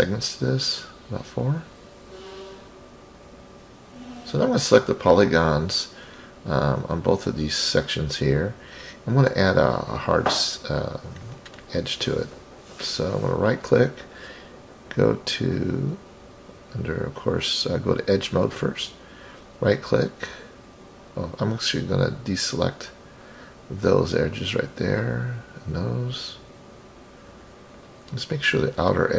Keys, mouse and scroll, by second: 0.0 click, 0.2 click, 1.2 click, 3.8 drag, 4.4 click, 6.2 middle click, 7.7 shift+click, 15.7 right click, 16.6 click, 20.0-20.9 scroll up 6, 21.4-22.5 ctrl+drag, 24.0-25.2 ctrl+drag, 25.8-27.4 ctrl+drag, 27.9-28.7 scroll down 6.